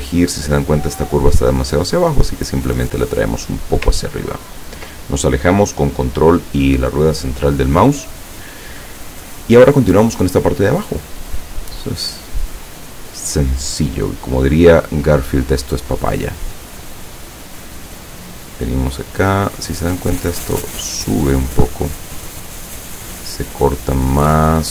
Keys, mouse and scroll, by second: 1.9-3.8 drag, 4.1-4.5 ctrl+scroll down 2, 11.4 click, 19.4 click, 20.2 click.